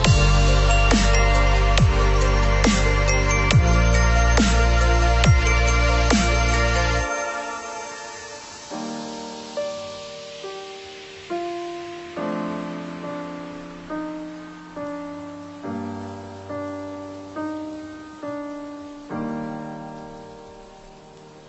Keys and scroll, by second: 13.1 Left, 14.2 Left, 15.7 ctrl+-.